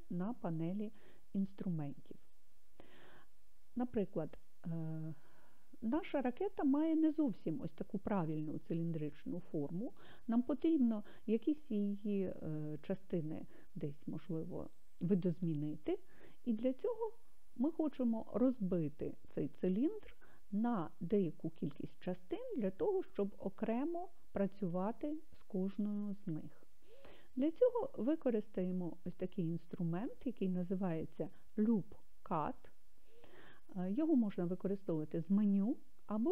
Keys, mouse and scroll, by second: 1.6 click.